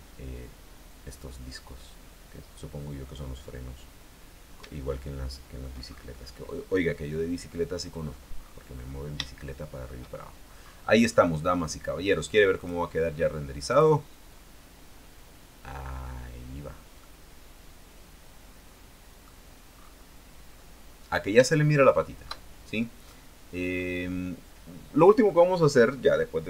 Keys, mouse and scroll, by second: 3.5-4.8 scroll down 2, 5.0 shift+middle click, 6.4 scroll up 2, 7.0-7.4 scroll down 2, 8.0-8.5 scroll up 2, 8.5-9.2 scroll down 4, 9.4 shift+middle click, 10.2-10.7 shift+scroll down 1, 11.2 scroll up 1, 11.4-12.7 scroll down 1, 12.7 click, 13.8 click, 16.4 scroll down 1, 17.2-19.6 middle drag, 19.9-20.3 scroll up 2, 20.7-21.3 scroll down 2, 21.6 shift+middle click, 23.2 middle click, 24.8 scroll down 2.